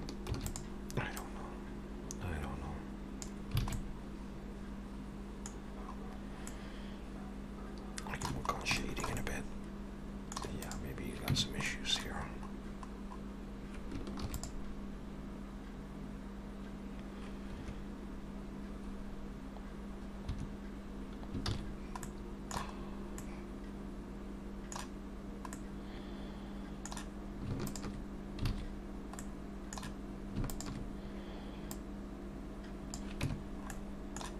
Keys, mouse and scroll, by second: 0.3 shift+d, 1.2 click, 3.6 alt+a, 3.7 middle click, 5.6-6.3 scroll down 5, 6.5 middle click, 8.5 scroll up 3, 8.8 shift+middle click, 9.2 middle click, 10.6 click, 11.3 Tab, 11.7 middle click, 12.3 scroll up 1, 13.0-13.4 scroll up 2, 14.2 ctrl+r, 20.3 Escape, 21.5 ctrl+z, 22.0 middle click, 22.8-23.3 scroll up 2, 23.2 middle click, 25.5 middle click, 27.6 alt+shift+click, 28.5 alt+a, 29.2 middle click, 30.5 alt+shift+click, 31.7 click, 33.3 Tab, 33.4 scroll down 3, 33.7 middle click.